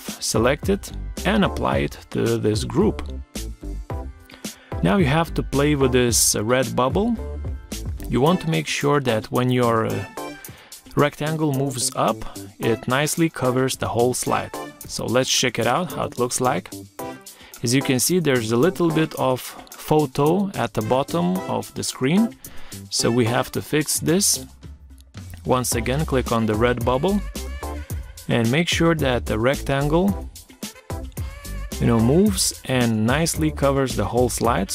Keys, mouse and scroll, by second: 2.7 ctrl+scroll up 1, 5.1 shift+click, 14.7 Right, 18.7 Left, 19.5 Right, 22.8 Escape, 26.0 ctrl+scroll up 1, 30.6 shift+click.